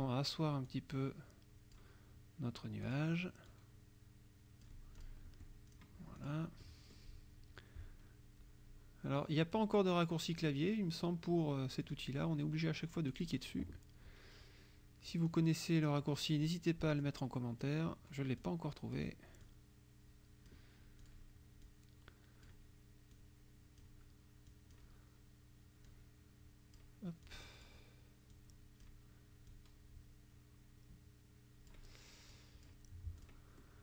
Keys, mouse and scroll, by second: 0.7-2.0 drag, 2.9 click, 3.5-4.9 drag, 5.0 click, 5.3 F1, 5.7 click, 6.2 click, 6.7 click, 11.9 click, 13.2 click, 15.3-16.6 drag, 17.1 click, 18.4 click, 19.4-20.7 drag, 21.1 click, 21.7 click, 23.2 click, 24.6 click, 25.9-27.0 drag, 27.3 click, 28.4 click, 29.5-31.9 drag, 32.4 click, 33.2 click, 33.7 click.